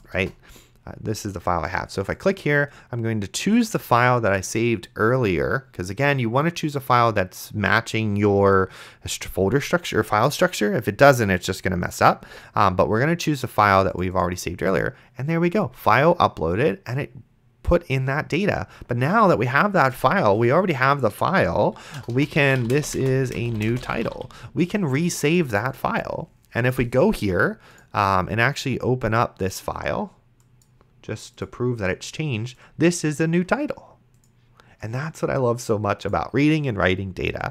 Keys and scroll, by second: 22.3-24.7 typing.